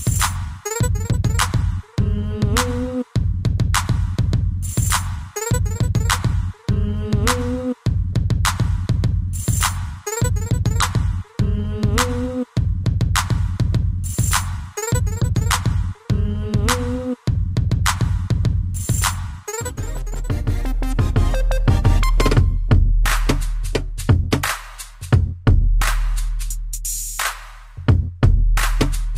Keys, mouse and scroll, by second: 0.0 click, 1.3 Escape, 2.8 middle click, 3.2 scroll up 1, 3.6 b, 4.1 middle click, 5.9 i, 6.6 Escape, 8.4 click, 8.5 click, 9.6 click, 9.7 click, 10.3 click, 10.4 click, 11.1 scroll down 1, 12.0 g, 12.2 click, 12.3 click, 12.7 middle click, 13.1 scroll up 1, 13.9 b, 14.2 middle click, 17.6 click, 18.9 Escape, 20.4 click, 21.9 middle click, 24.3 middle click, 25.4 middle click, 27.0 shift+middle click, 27.7 middle click, 28.4 middle click, 28.7 scroll up 1.